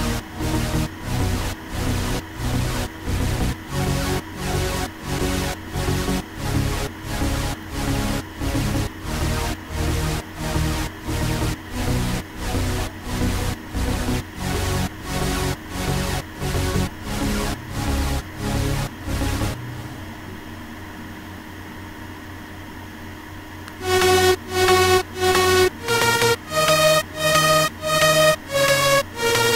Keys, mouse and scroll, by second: 11.2 click.